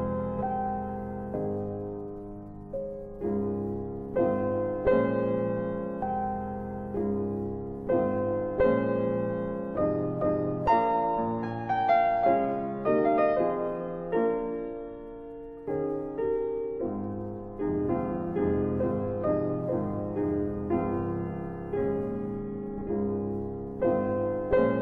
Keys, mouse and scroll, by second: 0.2 middle click, 1.9 click, 2.8 scroll down 1, 3.5-4.0 scroll up 1, 6.3 click, 6.9 middle click, 7.7 scroll down 1, 8.5 click, 10.0 click, 11.2 click, 13.5 ctrl+z, 14.3 scroll up 1, 16.4 alt+c, 19.4 alt+c, 21.2 alt+c, 21.7 scroll up 1, 24.2 click.